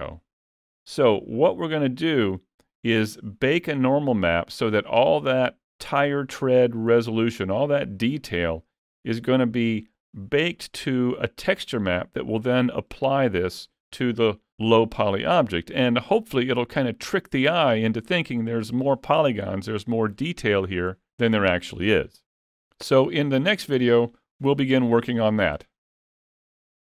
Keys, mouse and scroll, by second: 1.5 click, 2.4 middle click, 23.6 middle click.